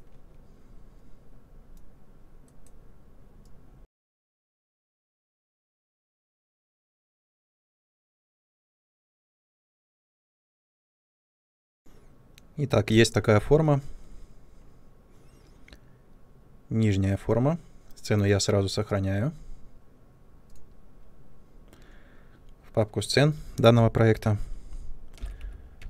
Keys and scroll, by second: 5.5 r, 6.0 w, 6.6 r, 7.2 w, 9.4 ctrl+space, 10.0 space, 11.6 typing, 11.8 ctrl+space, 12.8 ctrl+space, 25.1 shift+l, 25.3 i.